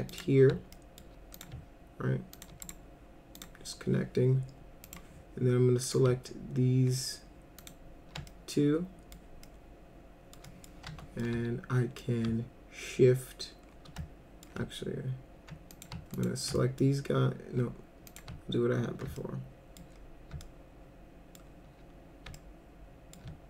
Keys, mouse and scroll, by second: 0.1 click, 0.7 alt+middle click, 1.3 click, 2.3 ctrl+click, 2.6 right click, 3.4 click, 4.9 click, 5.8 click, 7.6 ctrl+click, 8.3 alt+middle click, 9.5 alt+middle click, 10.4 middle click, 10.9 F3, 11.2 alt+middle click, 14.0 alt+middle click, 15.7 click, 16.1 ctrl+click, 16.5 alt+middle click, 18.1 click, 19.2 alt+middle click, 20.4 alt+middle click, 22.4 alt+middle click.